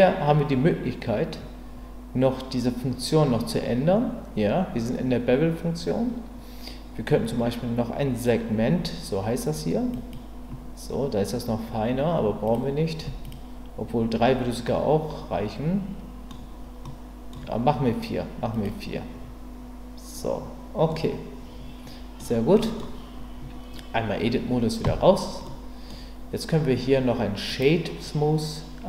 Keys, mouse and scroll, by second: 9.9 click, 12.4 click, 13.2 click, 14.7-16.4 middle drag, 16.9 middle click, 18.5 click, 21.0-22.2 middle drag, 22.5 middle click, 24.8 Tab, 25.4 middle click, 27.9-28.8 right drag.